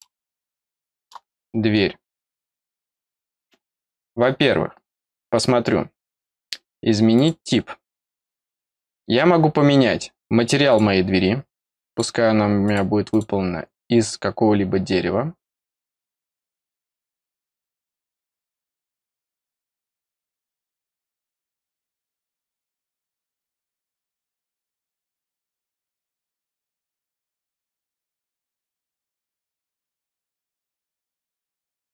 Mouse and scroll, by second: 0.1 scroll up 1, 0.4 middle click, 1.0-1.4 scroll up 1, 1.4 middle click, 1.9 scroll up 2, 2.7 click, 3.2-3.8 scroll down 2, 3.8 middle click, 4.6 scroll down 2, 5.3 middle click, 7.1 click, 10.6 click, 11.8 click, 12.6 click, 13.0 click, 18.6-20.7 scroll down 8, 20.7-22.5 scroll down 11, 22.5-22.8 scroll up 4, 25.2-25.5 scroll up 2, 26.5-27.8 scroll down 1, 28.0-28.3 scroll down 1, 28.6-29.2 scroll down 1, 29.4-31.3 scroll down 1, 31.6 scroll up 1.